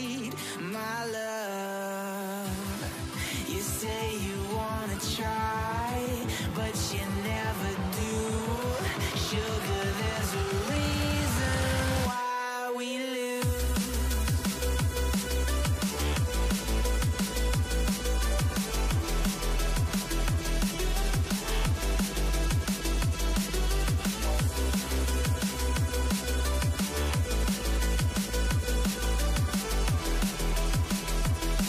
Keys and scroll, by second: 1.7 ctrl+l, 2.0-4.7 typing, 8.3-9.1 typing, 12.0-19.9 typing, 13.7 Return.